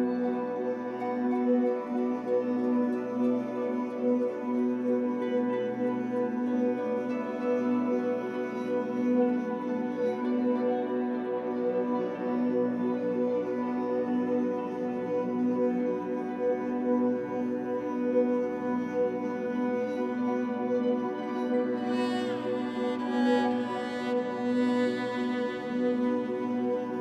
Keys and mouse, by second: 0.8-4.4 alt+drag, 6.0 click, 7.0 click, 7.2 click, 10.3 click, 13.4 space, 14.2 space, 17.4 click, 17.9 click, 18.4 click, 20.2-20.7 typing, 20.9 Return, 22.1 click, 22.6-23.4 alt+drag, 24.0 click, 24.0 typing, 25.0 click, 25.6 click, 26.6-27.0 typing.